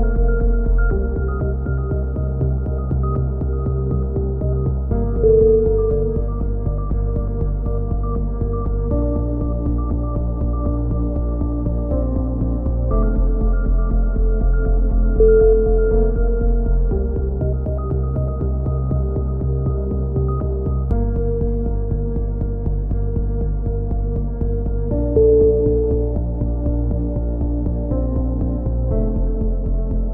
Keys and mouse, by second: 0.7 KP_7, 2.5 ctrl+r, 5.2-6.5 drag, 6.5-7.7 middle drag, 7.7-9.3 drag, 9.7 right click, 10.6 click, 11.3 a, 12.7 z, 13.0 z, 13.3 z, 14.0-15.0 drag, 15.8 KP_3, 16.3 z, 19.4 click, 19.9 right click, 20.4 c, 21.3-22.3 drag, 22.3 right click, 22.9 g, 25.2-27.2 drag, 26.7 g, 28.4-29.5 drag.